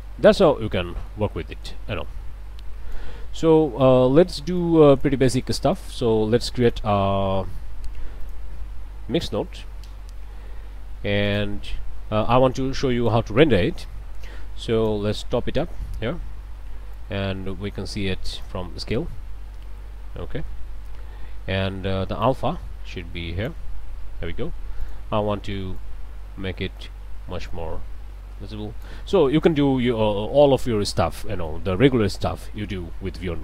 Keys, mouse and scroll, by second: 0.1-1.3 drag, 1.7-3.2 drag, 3.5 middle click, 3.9 click, 4.6-5.7 drag, 5.8 click, 6.3 shift+a, 6.7 shift+click, 8.2 click, 9.1 m, 9.2 i, 9.4 x, 9.9 Return, 11.3 click, 12.0 click, 13.1-15.1 drag, 15.4 click, 19.4 scroll down 2, 19.7 scroll up 1, 22.2-23.7 drag, 24.8 click, 25.8-29.1 drag, 31.5 click.